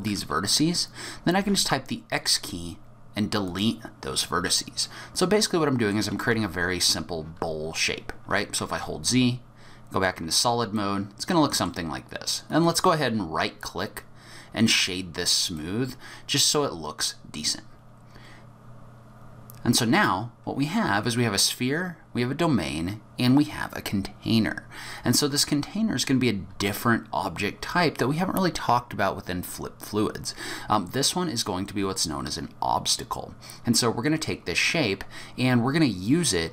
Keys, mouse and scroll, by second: 1.4 x, 4.8 middle click, 6.3 Tab, 8.6 z, 9.1 z, 10.7 middle click, 12.5 right click, 15.6 middle click.